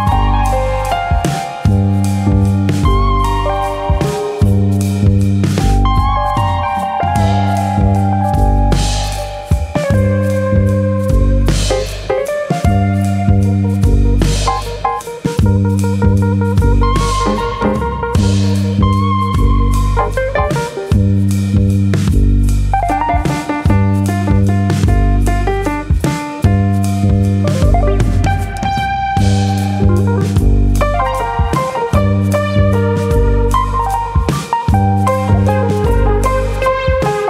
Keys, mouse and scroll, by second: 0.1 click, 0.5 middle click, 0.7 middle click, 1.8 shift+click, 2.1 shift+click, 2.1 middle click, 2.6 click, 3.9 KP_3, 4.5-5.1 scroll down 3, 5.7 click, 6.4 click, 9.3 middle click, 9.8 middle click, 10.8 KP_1, 12.6 ctrl+Tab, 14.4 click, 17.1 scroll up 1, 17.4 Tab, 17.9-18.2 scroll up 1, 18.4 alt+click, 18.4-19.0 scroll up 2, 19.0 alt+click, 20.0 alt+click, 20.5 ctrl+KP_Add, 20.7 ctrl+KP_Add, 21.8 s, 25.2 right click, 26.2 s, 27.1 right click, 30.0 2, 30.3 alt+click, 31.1 alt+shift+click, 32.8 alt+click, 36.2 ctrl+b, 36.2 alt+shift+click.